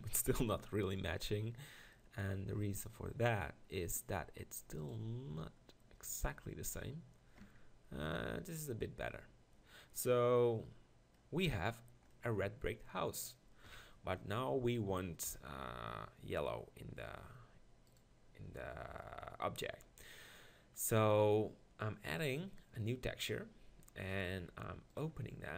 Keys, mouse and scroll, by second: 4.2 s, 5.0 click, 5.0 g, 7.5 Tab, 13.7 KP_1, 17.2 Tab, 22.2-25.0 drag.